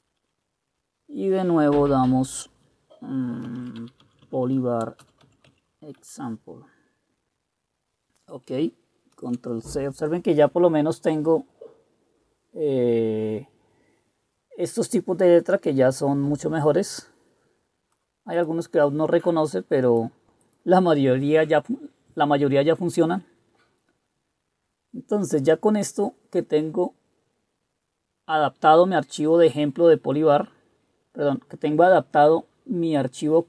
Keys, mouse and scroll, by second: 0.0-0.1 typing, 3.3-5.6 typing, 6.1 Return, 9.3 ctrl+c.